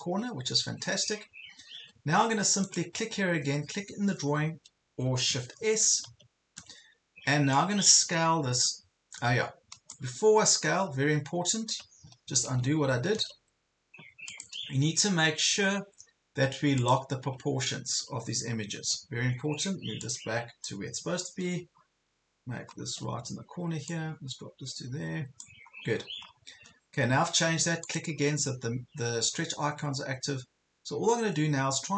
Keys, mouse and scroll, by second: 0.5 ctrl+scroll down 1, 1.5 ctrl+scroll down 1, 2.8 click, 5.6 shift+s, 7.6-10.3 drag, 12.3 ctrl+z, 13.2 ctrl+z, 14.3-15.3 drag, 17.7 ctrl+scroll up 1, 18.5 ctrl+scroll up 1, 20.0 click, 21.3 ctrl+scroll down 1, 21.8 ctrl+scroll up 1, 22.7 ctrl+scroll down 1, 23.9-25.5 drag, 25.7-26.1 ctrl+scroll down 2, 27.2 ctrl+scroll down 1, 27.8-31.9 drag.